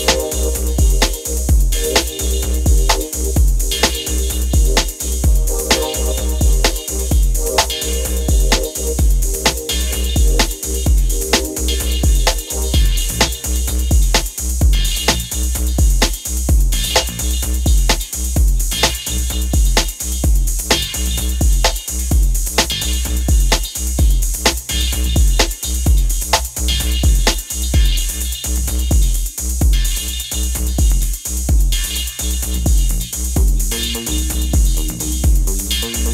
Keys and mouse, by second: 1.6 click, 1.7 click, 2.8 click, 3.0 click, 4.2 click, 4.7 click, 5.0 click, 5.5 click, 5.7 click, 8.5 click, 9.1 click, 9.4 click, 9.7 click, 10.2 click, 10.5 click, 11.2 click, 11.7 shift+click, 12.4 click, 12.7 click, 13.8-14.2 drag, 14.8 click, 15.1 click, 15.9 click, 18.0 click, 19.3 click, 19.8 click, 20.7 click, 21.5 click, 22.2 shift+right click, 23.6 right click, 23.7 right click, 24.3 shift+click, 26.1 click, 26.4 click, 26.6 right drag, 27.4 click, 27.6 click, 27.8 click, 29.5 click, 29.7 click, 34.0 drag.